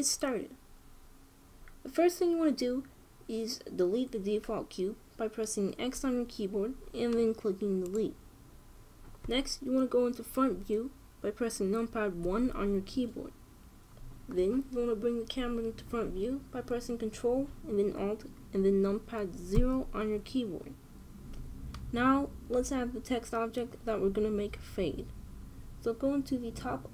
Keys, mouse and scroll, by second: 6.5 x, 12.9 KP_1, 20.2 ctrl+alt+KP_0.